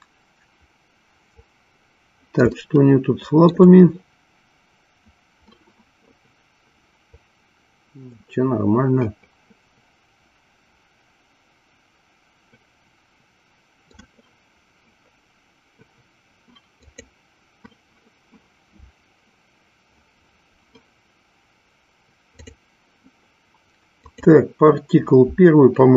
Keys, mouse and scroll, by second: 2.6-3.8 shift+middle drag, 8.4-14.2 middle drag, 16.8 click, 22.4 click.